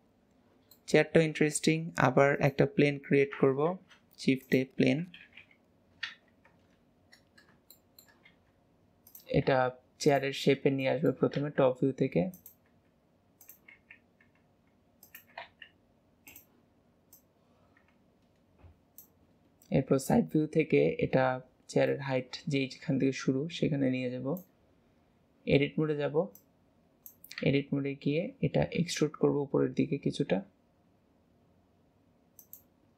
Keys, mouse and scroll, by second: 0.3-0.8 scroll down 1, 0.8-1.6 middle drag, 1.6 shift+a, 3.3 ctrl+z, 3.7 shift+a, 5.5 KP_7, 6.1 alt+z, 7.2-7.8 scroll up 4, 7.8-8.3 shift+middle drag, 8.3 g, 10.5 scroll up 3, 11.1 middle click, 11.5 g, 17.2 click, 20.1 KP_3, 22.0 click, 26.4 click.